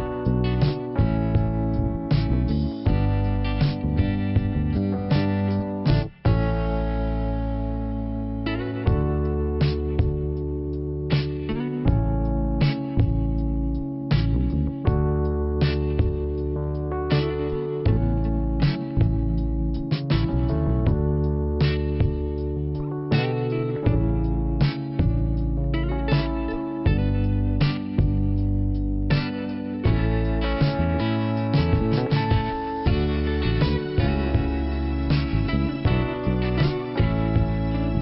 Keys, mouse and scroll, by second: 1.2 click, 3.5 click, 7.0 click, 9.9 click, 11.1 click, 14.7 click, 16.6 click, 18.2 click, 20.4 click, 21.6 click, 22.0 right click, 22.6 click, 22.9 click, 23.7 click, 24.5 click, 28.5 click, 28.9 click, 29.0 right click, 29.1 right click, 30.7 click, 32.4 click, 33.6 right click, 35.4 right click, 36.4 click, 37.3 scroll up 1.